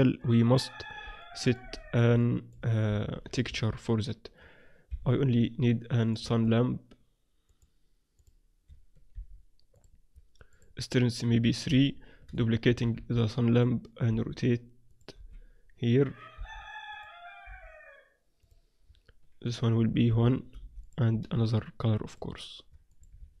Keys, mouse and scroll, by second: 1.2-3.8 middle drag, 2.8 shift+a, 4.8 KP_1, 6.0-7.6 drag, 6.4 shift+a, 9.1 r, 10.4-12.2 drag, 12.6 shift+d, 14.1 r, 15.1 KP_7, 16.3 g, 17.4 r, 19.4-22.8 drag.